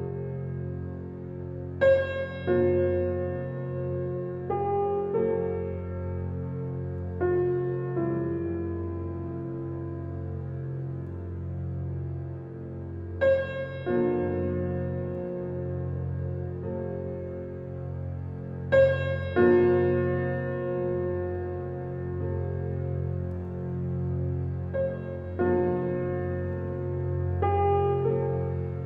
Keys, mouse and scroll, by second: 1.4 Tab, 2.7-5.3 drag, 14.2-15.2 shift+drag, 15.2 shift+middle click, 15.5 scroll up 4, 16.2-17.4 shift+drag, 17.4 shift+middle click, 17.9-19.5 shift+drag, 19.5 shift+middle click, 20.3-21.8 shift+drag.